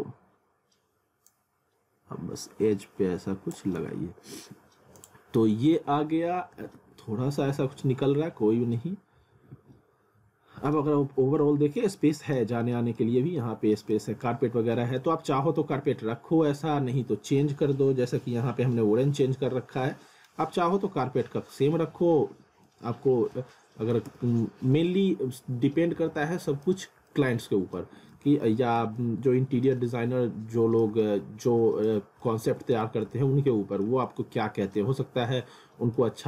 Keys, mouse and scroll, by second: 0.1 scroll up 1, 1.3 click, 3.8 z, 4.4 scroll down 1, 5.0 click, 5.7 alt+w, 6.7 w, 7.5-8.0 scroll up 1, 9.4 w, 10.2-10.6 scroll down 1, 10.7 alt+middle click, 12.1 middle click, 12.6 middle click, 13.5-13.9 scroll up 1, 13.9 middle click, 14.5-14.9 scroll down 1, 15.0 middle click, 15.7-16.1 scroll down 1, 17.6 scroll up 1, 18.7-19.3 scroll down 1, 19.9 middle click, 21.4-21.8 scroll up 1, 21.8 scroll down 1, 22.7 alt+middle click, 23.5 alt+middle click, 24.1 z, 25.0-25.8 scroll up 1, 26.0 alt+middle click, 27.1 alt+middle click, 29.0 middle click, 29.9 middle click, 31.0 middle click, 32.0 scroll up 1, 32.2 middle click, 32.9 scroll down 1, 33.1 middle click, 34.0 alt+middle click, 35.0 scroll up 1, 35.3 alt+middle click.